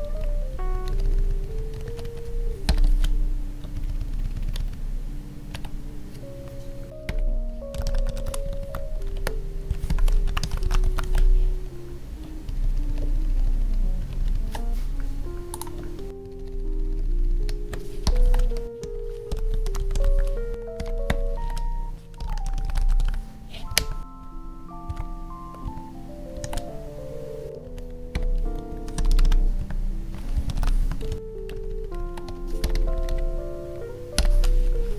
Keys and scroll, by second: 2.9 ctrl+s, 3.7 ctrl+Up, 6.9 Down, 9.1 space, 11.0 ctrl+s, 12.4 ctrl+Down, 16.1 Down, 18.2 ctrl+s, 20.5 space, 21.4 ctrl+s, 23.7 Down, 23.8 Tab, 25.7 Tab, 26.4 ctrl+s, 27.6 Right, 29.6 Tab, 30.8 Tab, 31.1 Up, 31.5 ctrl+Right, 32.3 Left.